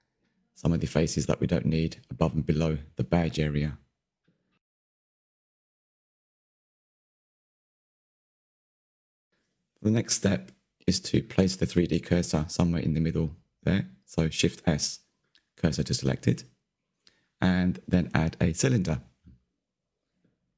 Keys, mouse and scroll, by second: 0.0 KP_3, 0.4-1.6 scroll up 5, 0.6 shift+middle click, 1.6 click, 2.0 a, 2.1 a, 2.9 click, 4.3 ctrl+KP_Add, 4.4 ctrl+KP_Add, 5.1 ctrl+KP_Add, 5.2 ctrl+KP_Add, 5.7 ctrl+KP_Add, 5.9 scroll down 2, 6.0 middle click, 6.4 scroll up 1, 6.7 ctrl+i, 7.5 Delete, 7.7-12.0 middle drag, 12.0 Tab, 15.9 shift+s.